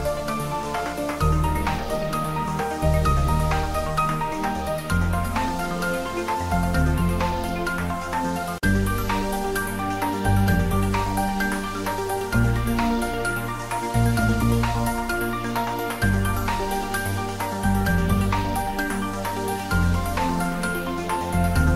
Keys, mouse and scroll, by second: 0.2-1.7 drag, 9.0-13.7 drag, 13.7-15.3 scroll up 1, 15.3 click, 16.9-20.2 drag, 21.0 scroll down 1, 21.6 click.